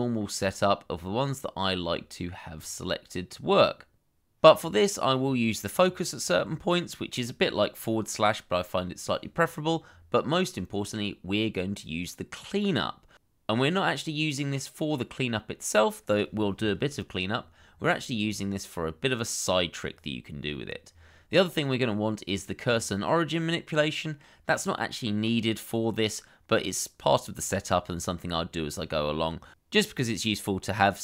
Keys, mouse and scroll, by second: 4.0-4.6 scroll up 1, 20.3-21.0 scroll down 1.